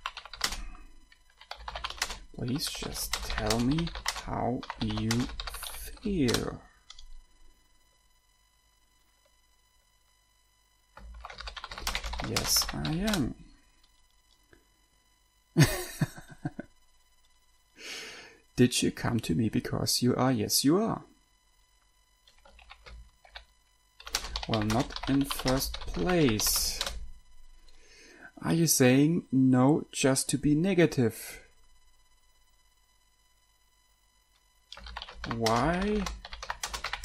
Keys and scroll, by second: 0.0-6.8 typing, 11.4-13.7 typing, 22.9-27.3 typing, 34.9-37.0 typing.